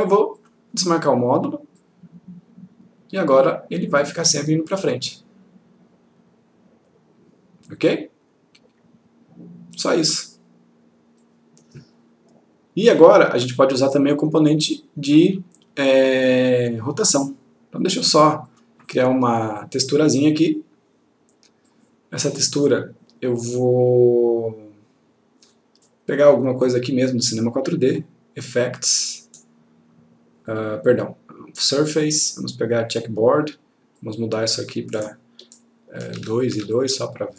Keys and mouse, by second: 11.3-12.0 click, 18.2 click, 26.2 click, 32.9 click, 36.5 click, 36.7 2, 36.9 click.